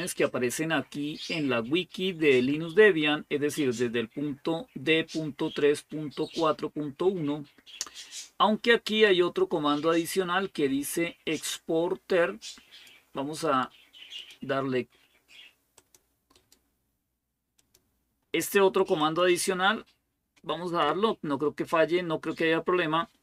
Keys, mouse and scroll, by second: 8.8-13.0 drag, 14.0 click, 15.6 click, 16.2 right click, 17.4 click, 18.8 click, 20.6 Return.